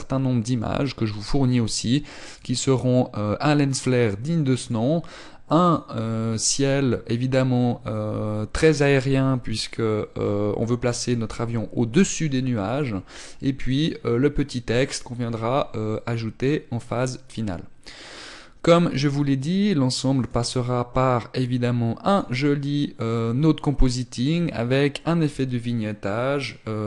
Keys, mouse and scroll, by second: 20.2 click.